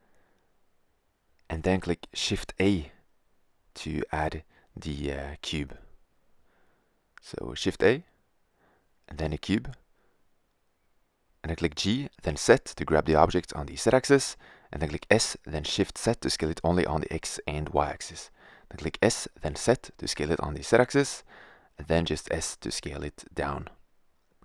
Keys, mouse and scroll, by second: 0.5-1.4 middle drag, 7.6 shift+a, 11.8 g, 14.0 s, 16.0-16.9 drag, 17.3 s, 19.6 s, 24.0 middle click.